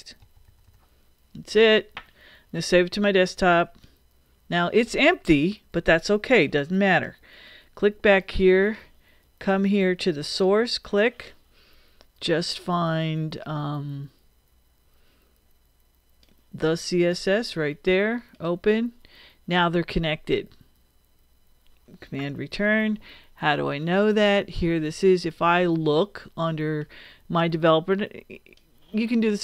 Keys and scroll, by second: 0.0-0.9 typing, 22.3 super+Return.